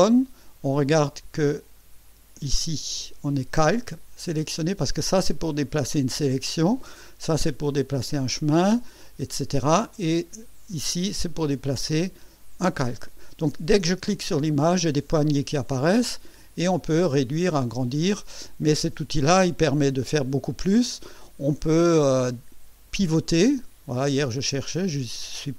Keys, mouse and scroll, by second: 5.3 click, 7.2 click, 11.3 click, 14.5 click, 16.6-18.1 drag, 21.8-25.5 drag.